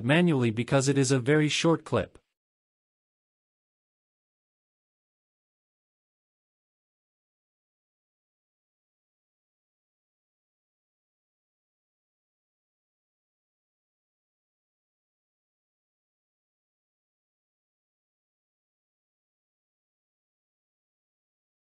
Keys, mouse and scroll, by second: 2.8 drag, 3.6-5.7 drag, 6.8 click, 7.8 click, 9.6-11.8 drag, 14.1 x, 18.5 click, 20.8 space.